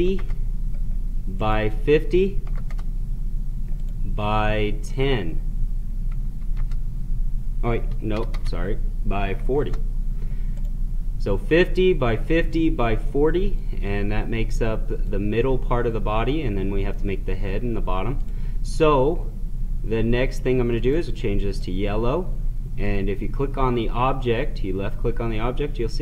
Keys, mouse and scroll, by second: 1.3 click, 3.7 click, 8.2 BackSpace, 10.5 click, 13.6-17.4 drag, 18.1 click, 20.6 click.